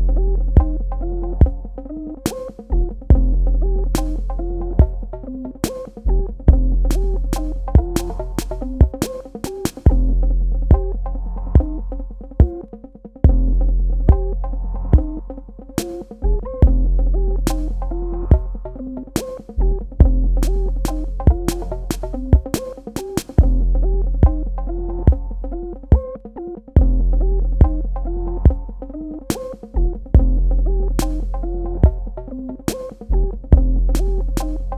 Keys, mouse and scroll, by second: 1.0 ctrl+alt+click, 2.3 ctrl+alt+click, 3.9 l, 4.2 click, 9.1 click, 10.1 ctrl+click, 10.4 ctrl+space, 10.7 click, 10.9 space, 12.4 click, 22.0-22.4 scroll down 1, 22.4-23.1 scroll up 1, 23.1 click, 24.2 space, 24.4 click, 32.7 click.